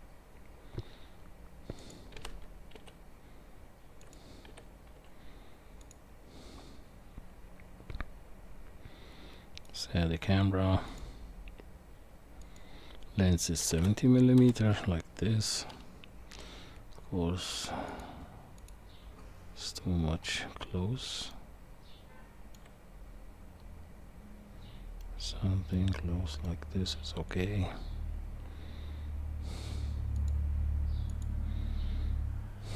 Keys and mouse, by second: 12.9-14.4 drag, 17.9 click, 18.6 click, 21.3-22.6 shift+middle drag, 25.0-26.5 middle drag, 30.1 click.